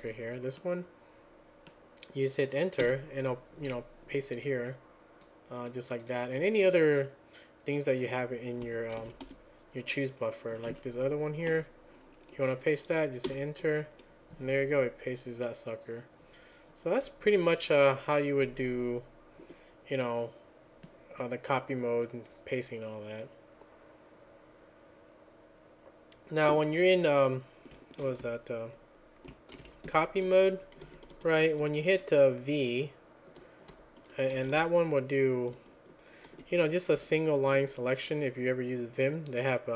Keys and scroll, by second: 5.1 Return, 9.2 ctrl+a, 9.2 =, 10.5 Down, 10.7 Down, 15.0 Return, 29.6 ctrl+c, 29.6 ctrl+a, 29.9 Escape, 30.6-37.5 typing, 39.5-39.7 typing.